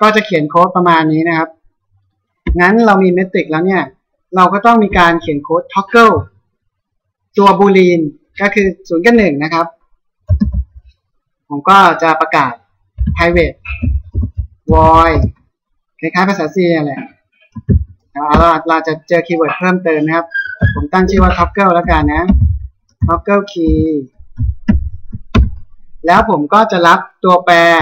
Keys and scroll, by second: 10.1 ctrl+s, 17.9 BackSpace.